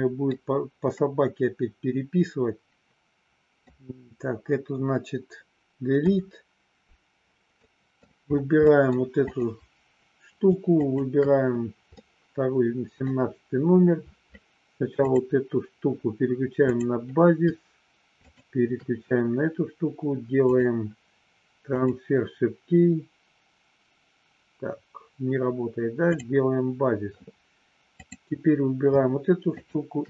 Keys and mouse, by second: 1.0-3.6 middle drag, 6.0 Delete, 7.5 middle click, 8.5 middle click, 9.3 click, 10.7 shift+click, 12.0 middle click, 15.1 click, 16.6 click, 18.1 shift+click, 20.4-21.9 drag, 29.5 shift+click.